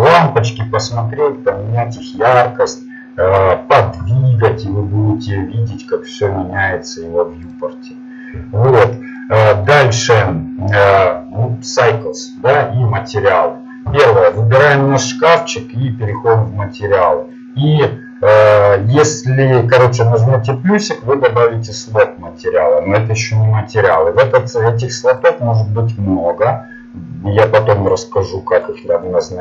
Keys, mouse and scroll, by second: 4.6 g, 9.2-12.5 middle drag, 14.4-17.4 right drag, 17.4-28.9 drag.